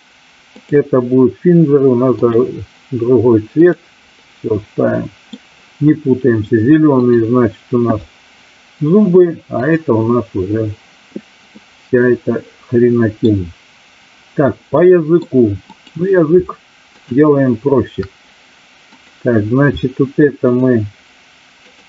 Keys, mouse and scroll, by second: 0.5-2.4 drag, 3.5 click, 4.5 middle click, 7.1 click, 9.5 click, 11.7-13.2 middle drag, 14.8 middle click, 15.5 click, 16.9-17.3 shift+drag, 20.4 shift+click, 21.7 shift+click.